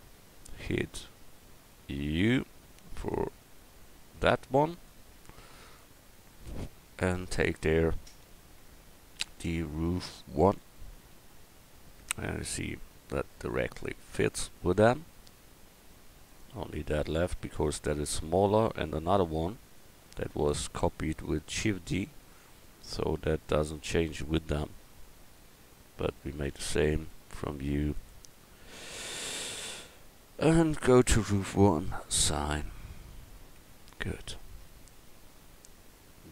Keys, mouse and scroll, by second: 2.2 u, 12.8 Tab, 16.3-17.5 right drag, 16.9 Tab, 21.1 middle click, 24.1 middle click, 26.4 u, 32.9 middle click, 33.6 Tab, 34.0 middle click, 34.7-36.3 middle drag.